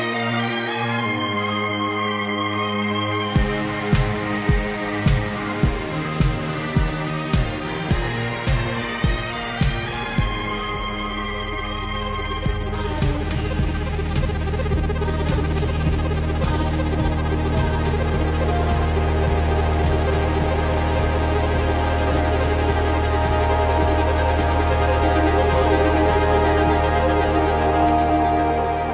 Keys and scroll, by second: 5.4 ctrl+z, 7.3 ctrl+z, 7.8 ctrl+z, 10.6 ctrl+z, 11.4 ctrl+z, 12.7 ctrl+z, 14.0 ctrl+z, 18.5 ctrl+z, 19.9 ctrl+z, 20.1 space, 21.8 ctrl+z, 22.7 ctrl+z, 22.9 ctrl+z, 27.2 ctrl+z, 28.3 ctrl+z.